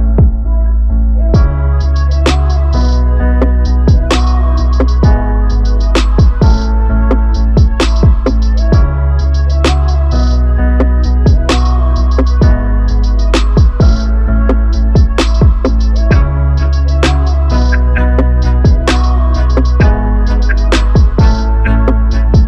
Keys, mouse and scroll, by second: 0.0-2.8 drag, 2.8 KP_0, 13.1 r, 17.7 click, 18.5 right click.